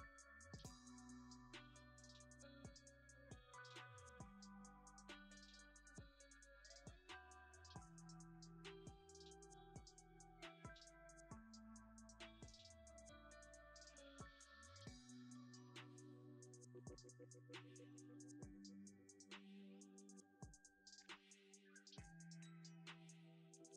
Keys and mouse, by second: 4.7 g, 5.0 click, 6.0 shift+middle click, 8.4 r, 8.6 click, 9.1 g, 9.4 click, 9.9 alt+click, 10.9 g, 11.4 click, 13.4-18.1 drag, 19.2 s, 20.1 click, 20.5 g, 20.8 click, 22.3 g, 22.7 click, 23.3 g.